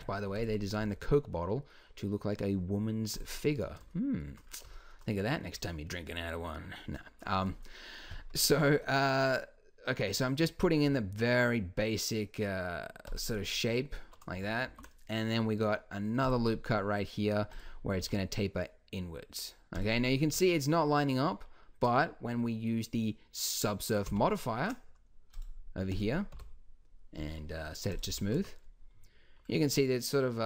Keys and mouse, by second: 0.8 s, 8.6-10.8 middle drag, 10.9 s, 14.7 ctrl+r, 18.0 s, 20.2 Tab, 24.0 ctrl+1, 26.3 t, 28.1 t, 28.3 z.